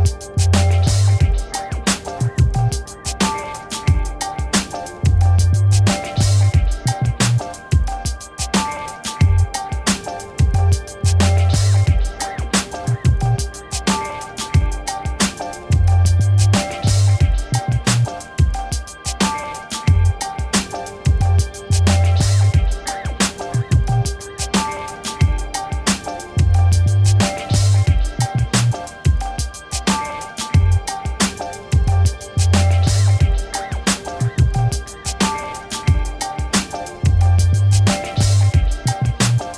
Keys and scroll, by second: 1.8 ctrl+z, 4.4 b, 12.7 Return, 20.5 ctrl+j, 22.7 ctrl+j, 27.5 v, 33.2 ctrl+t, 37.5 Return, 39.1 ctrl+t.